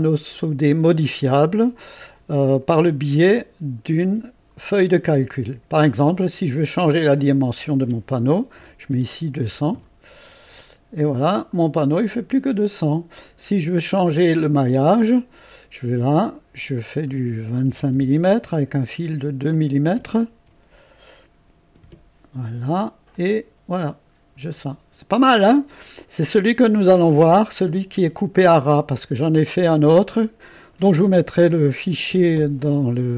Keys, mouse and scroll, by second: 2.6 click, 7.2 click, 8.6-9.4 typing, 9.7 Return, 11.1 click, 13.5-14.7 scroll up 1, 14.9-16.4 typing, 15.3 click, 15.6 click, 16.8 click, 17.7 typing, 19.5 click, 20.5 typing, 21.8 Return, 22.9-23.6 typing, 23.1 click, 24.1-24.5 scroll up 1, 24.5 middle click, 25.6-26.1 scroll down 1, 26.1-27.1 scroll up 1, 27.1-27.5 scroll up 1, 29.4 click.